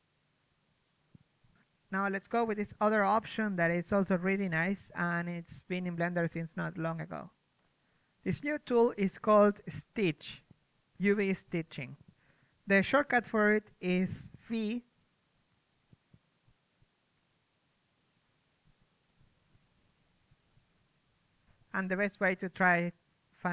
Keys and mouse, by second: 4.4-9.7 middle drag, 11.6-13.1 middle drag, 13.1 a, 13.5 a, 13.9 a, 14.1 a, 14.3-23.5 middle drag.